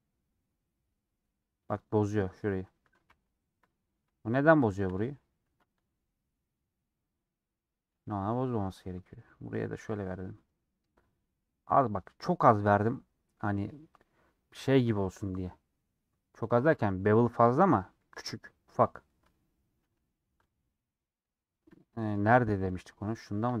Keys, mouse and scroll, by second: 4.0 scroll up 1, 4.2 scroll down 1, 4.7 shift+middle click, 4.9 scroll up 1, 5.4 ctrl+b, 10.1 scroll down 2, 10.3-12.6 middle drag, 12.6-14.1 scroll up 1, 18.9 scroll down 1, 19.0 middle click, 19.8 /, 20.2 scroll down 2, 20.4 middle click, 20.6-21.6 middle drag, 21.6-21.9 scroll down 2, 21.9-23.6 middle drag.